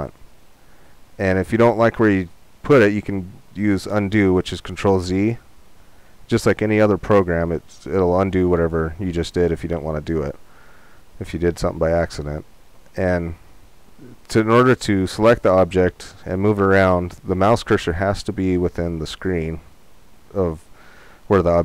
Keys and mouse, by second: 5.5 ctrl+z, 9.3-15.3 middle drag, 15.3-18.7 drag.